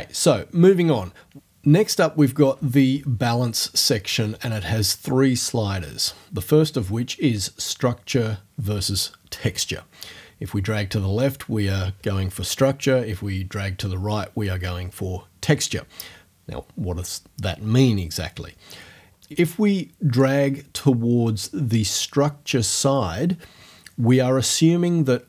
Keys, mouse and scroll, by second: 20.2-21.6 drag.